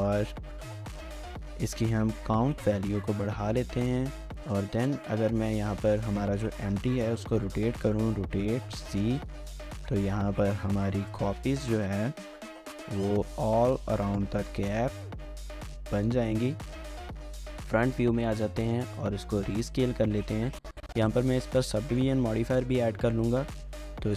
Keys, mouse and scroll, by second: 7.1 typing, 8.1 typing, 13.1-13.8 typing, 14.3 shift+click, 14.9 scroll up 1, 15.1 shift+middle click, 16.5-17.4 typing, 17.5 scroll up 1, 17.6 scroll, 17.7 shift+middle click, 18.2 scroll up 1, 19.1 scroll down 1, 19.3 shift+middle click, 19.9-22.8 scroll up 1.